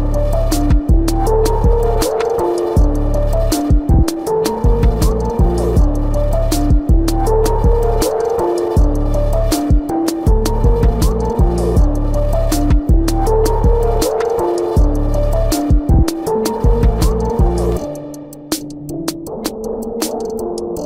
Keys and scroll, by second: 0.0 ctrl+alt+z, 0.9 space, 3.9 ctrl+-, 4.3 space, 5.0 ctrl+-, 5.1 space, 6.2 space, 6.6 space, 8.5 space, 9.4 space, 10.5 space, 11.6 space, 13.0 ctrl+alt+z, 13.0 ctrl+-, 13.4 space, 14.4 space, 15.6 space, 17.0 space.